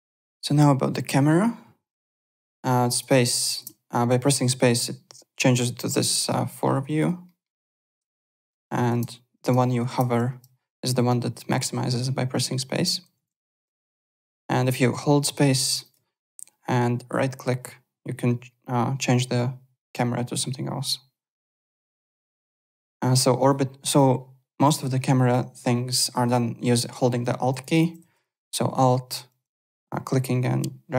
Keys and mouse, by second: 1.8 click, 2.4 space, 3.6 space, 6.2 alt+middle click, 7.2 alt+middle click, 7.9 space, 10.9 space, 11.6 space, 12.8 space, 13.2 alt+Tab, 14.1 alt+Tab, 14.6 click, 14.6 space, 14.9 right click, 15.6 space, 15.8 click, 15.9 space, 16.3 right click, 21.6 space, 22.0 alt+Tab, 23.3 click, 23.4 right click, 23.9 click, 28.8 alt+click.